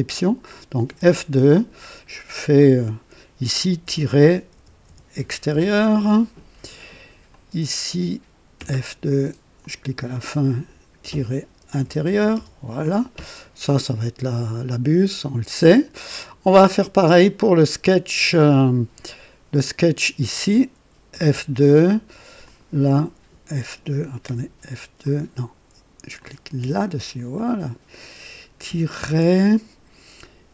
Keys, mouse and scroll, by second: 0.1 click, 0.8 F2, 1.4 click, 3.7-5.6 typing, 7.2 click, 8.5 typing, 9.5 click, 10.9-12.9 typing, 18.1 click, 19.5 click, 21.0 F2, 22.3 click, 24.1 F2, 24.9 click, 26.1 click, 26.5 F2, 26.6 F2, 27.3 click, 27.7 typing, 29.0 typing.